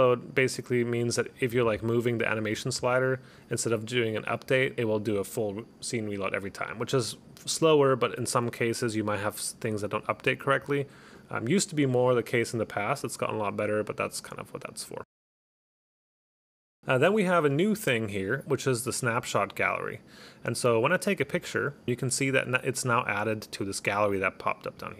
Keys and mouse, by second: 21.3 click, 24.8 click.